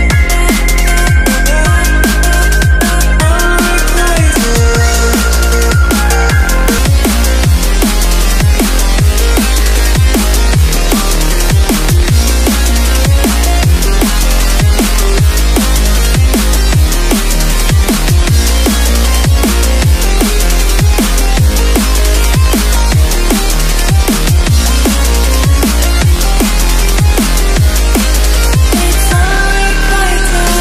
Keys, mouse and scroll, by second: 0.4 Right, 0.5 Return, 0.9 click, 1.0 Return, 1.4 click, 1.6 Delete, 1.8 BackSpace, 2.2 click, 3.5 KP_Add, 3.7-5.7 typing, 4.8 Return, 5.0 KP_Add, 6.4 click, 6.8 Delete, 7.1 click, 8.7 Right, 9.7 ctrl+t, 9.8 click, 10.7 Return, 11.0 click, 11.9 alt+Tab, 12.4 click, 12.7 alt+Tab, 12.9-14.6 typing, 14.4 click, 15.1 click, 15.7 Tab, 15.9 click, 16.3 Tab, 16.5 ctrl+v, 16.9 click, 19.5 Right, 20.1 0, 20.9 scroll up 1, 22.7 click, 23.3 right click, 25.1 click.